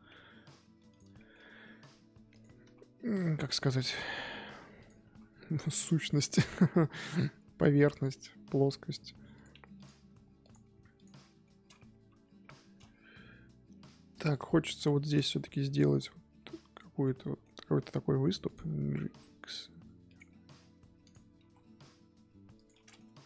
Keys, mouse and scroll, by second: 0.9 click, 1.1 shift+middle click, 1.4-2.3 scroll up 1, 2.3 click, 3.1-5.4 drag, 5.4 scroll down 1, 5.6-6.7 middle drag, 6.7 click, 7.0 middle click, 7.9 click, 8.1-9.3 middle drag, 9.3 click, 9.7 ctrl+click, 10.4 click, 10.9 ctrl+click, 11.2 middle click, 11.9 KP_1, 12.4-16.5 middle drag, 16.5 click, 17.0-18.4 middle drag, 18.4 click, 20.3 middle click, 21.0 click, 22.7 middle click, 23.0 Tab, 23.2 scroll down 1.